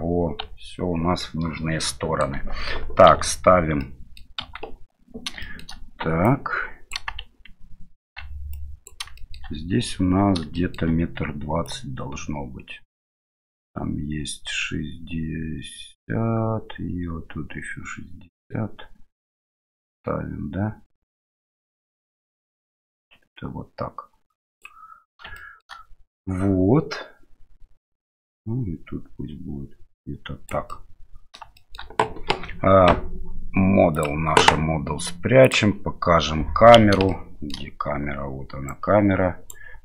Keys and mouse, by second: 0.4 Tab, 1.2-2.3 middle drag, 3.1 KP_Divide, 3.8-4.2 middle drag, 4.4 KP_7, 5.4 shift+middle drag, 6.3-6.9 drag, 8.1 shift+z, 8.6 drag, 9.2 middle click, 10.5-10.9 middle drag, 11.7-24.7 drag, 25.4 shift+middle click, 28.1-30.5 drag, 30.7-31.4 middle drag, 31.6 shift+middle click, 32.3 KP_7, 34.0 click, 37.2-37.5 shift+middle drag, 38.7 right click.